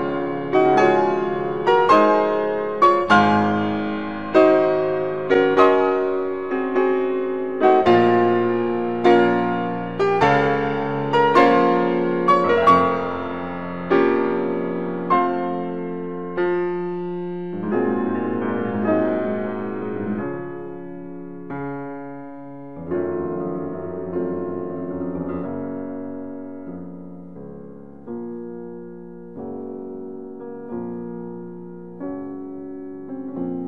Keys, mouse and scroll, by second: 3.4 click, 7.9-10.7 middle drag, 10.7-12.7 middle drag, 12.7 e, 13.8 z, 16.8 z, 17.3 click, 18.1 ctrl+z, 19.3 e, 21.2 z, 26.6 s.